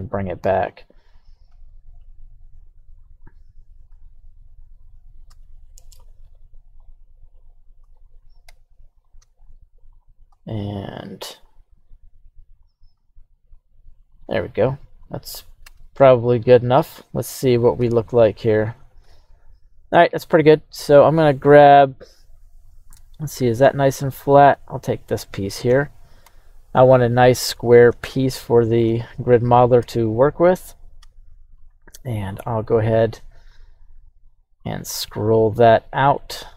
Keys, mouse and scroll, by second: 1.5 g, 2.5 right click, 3.0 right click, 3.9 g, 4.8-5.3 right drag, 5.5-6.0 shift+right drag, 6.2 shift+right click, 6.8 shift+right click, 7.2 shift+right click, 7.9 right click, 8.4 h, 9.0 right click, 9.4-10.0 shift+right drag, 11.3 g, 12.5 right click, 12.9 r, 14.1 click, 14.9 right click, 15.6 Tab, 16.2 right click, 16.7 alt+h, 17.8 Tab, 19.0 alt+h, 20.6 right click, 21.4-21.8 scroll up 1, 21.8 right drag, 22.9-24.2 middle drag, 24.9 right click, 25.2-25.6 middle drag, 26.2 KP_1, 28.1-28.8 shift+middle drag, 29.8 Tab, 30.2 right click, 31.0 q, 32.2-33.1 scroll up 2, 33.1 scroll down 1, 33.2 scroll down 1.